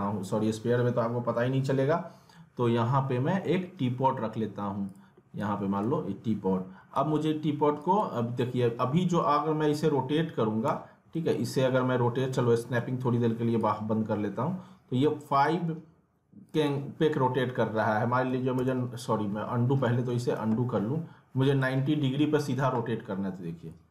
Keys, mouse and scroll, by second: 5.9 w, 6.9 click, 8.6 e, 9.0 middle click, 9.3-10.5 scroll up 1, 10.6 e, 12.0-12.8 typing, 12.8 middle click, 13.6-16.5 drag, 19.8 middle click, 20.3 ctrl+z, 21.5 click, 23.7-23.9 drag.